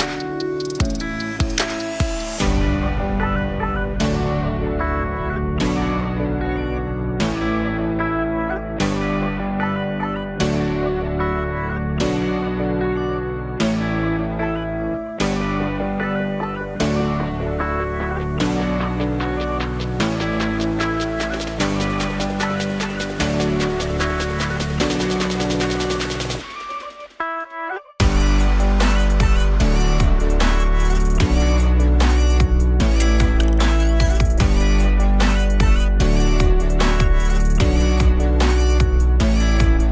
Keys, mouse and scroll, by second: 7.1 Tab, 9.3-11.1 drag, 11.1-15.0 middle drag, 15.0-15.5 scroll down 1, 15.5-17.4 middle drag, 17.4-23.2 drag, 26.3 click, 27.3-29.9 drag, 30.1-30.6 scroll down 4, 30.6 alt+click, 31.3-31.9 scroll up 3, 31.7 shift+a, 36.5 g, 38.0 KP_1, 38.6-39.6 alt+middle drag, 39.6 g.